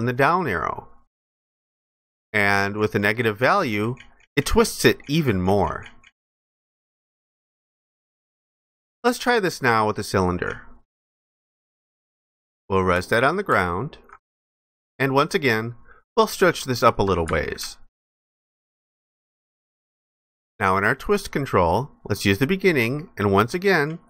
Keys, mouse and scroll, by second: 13.4 alt+click, 15.6 ctrl+shift+click, 17.7 alt+click.